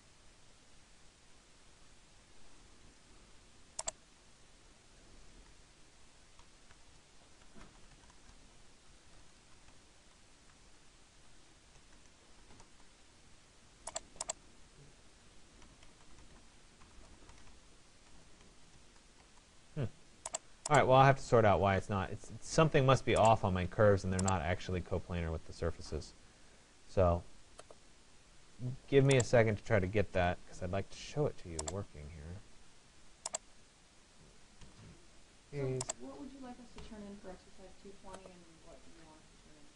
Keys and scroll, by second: 6.2 Return, 9.4 BackSpace, 9.6 g, 10.6 BackSpace, 12.8 Return, 16.4 BackSpace, 29.7 Delete, 34.2 Delete.